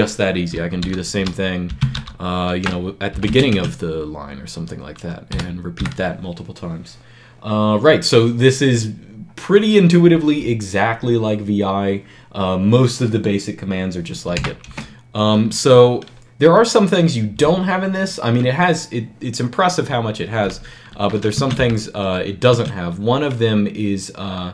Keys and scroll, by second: 0.6-3.1 typing, 3.4 Escape, 5.1 ., 5.6 ., 14.5 Return, 21.2 Escape, 21.4 k, 22.3 Escape, 24.4-24.5 typing.